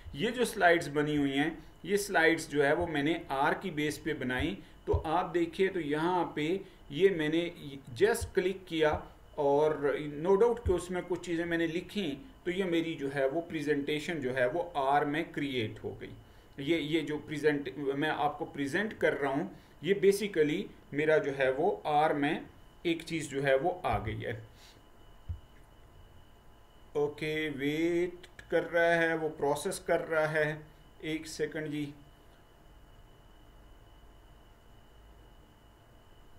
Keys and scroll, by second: 23.9 Print.